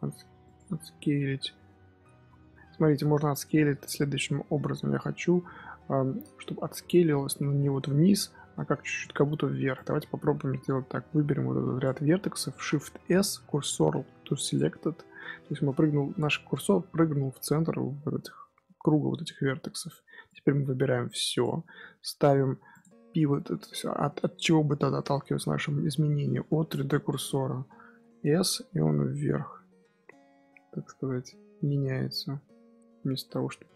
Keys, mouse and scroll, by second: 2.9 Tab, 4.1 Tab, 6.5 s, 9.7 click, 12.5 shift+s, 16.4-19.2 middle drag, 19.2 KP_1, 20.2 click, 22.6-25.7 drag, 27.9 s.